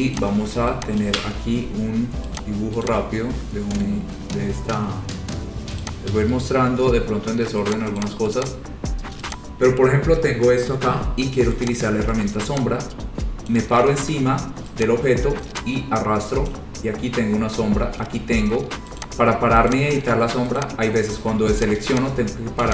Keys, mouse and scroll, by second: 0.3 click, 1.2 ctrl+click, 1.5 ctrl+click, 2.6 click, 3.1 click, 4.0 right click, 4.4 scroll down 2, 5.0 scroll, 6.0 click, 6.6 right click, 7.9 click, 7.9 middle click, 8.2 click, 8.5 click, 8.7-9.2 scroll, 9.5 click, 11.9 click, 13.7 click, 14.2 ctrl+z, 15.0 click, 16.7 click, 19.2 click, 19.9 click, 20.7 click, 21.8 click, 22.1 click.